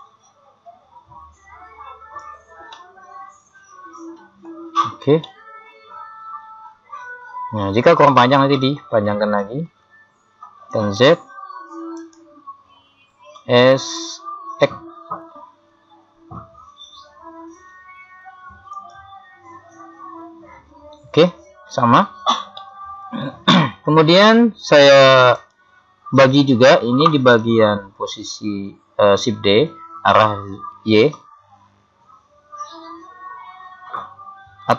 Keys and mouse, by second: 2.7 middle click, 4.9 z, 6.6 middle click, 9.4 KP_1, 10.8 z, 12.0 right click, 13.4 s, 22.6-25.4 middle drag, 25.4-28.1 right drag, 27.4 KP_3, 29.7 shift+d.